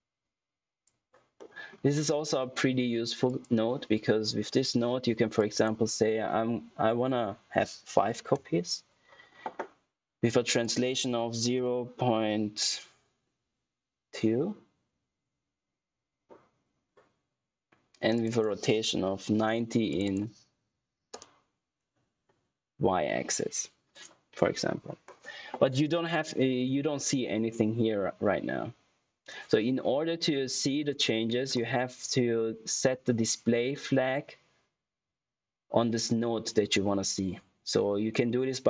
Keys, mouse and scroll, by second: 1.3 middle click, 1.8 scroll down 1, 3.2 click, 5.3 click, 10.2 click, 18.1 click, 23.8 click.